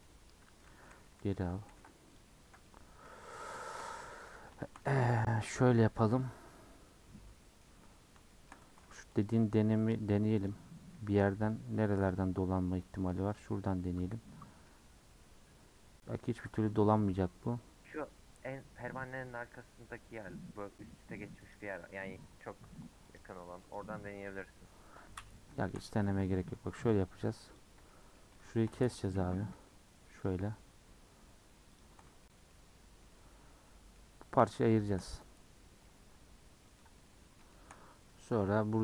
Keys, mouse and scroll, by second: 0.0 middle click, 0.7 ctrl+z, 0.9 ctrl+z, 1.2 ctrl+z, 1.7 ctrl+z, 2.1 click, 2.5 scroll down 1, 2.6 middle click, 3.3 scroll down 3, 3.6 shift+middle click, 3.9 scroll up 1, 4.0 middle click, 4.8 scroll up 3, 5.1-6.2 middle drag, 6.2 scroll up 2, 6.5-7.8 middle drag, 7.8-8.3 scroll up 1, 8.3 shift+middle click, 9.1 alt+click, 9.8 alt+click, 10.3 alt+click, 13.3 alt+click, 14.5 scroll down 1, 14.7-16.1 middle drag, 16.1 scroll up 1, 18.0-19.6 scroll up 1, 21.4 alt+click, 23.0 alt+click, 25.5 shift+middle click, 26.3-27.4 scroll up 1, 27.4 alt+click, 27.9 middle click, 29.0-30.2 scroll up 5, 30.2 alt+shift+click, 31.7 alt+shift+click, 32.2 middle click, 32.5-33.1 scroll down 6, 33.1-34.7 middle drag, 34.7 alt+shift+click, 35.5-35.8 scroll down 3, 35.8-37.9 middle drag, 37.9-38.2 scroll up 2, 38.2-38.8 shift+middle drag.